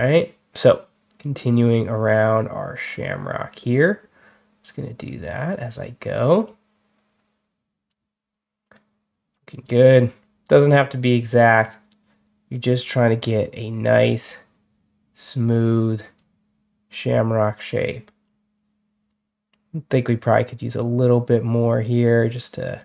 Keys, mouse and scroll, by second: 1.1-2.0 drag, 2.8-5.6 drag, 6.3-7.7 drag, 8.5 click, 11.1-12.4 drag, 13.2-16.0 drag, 18.1 click, 20.6 right click, 21.8 click, 22.6 click.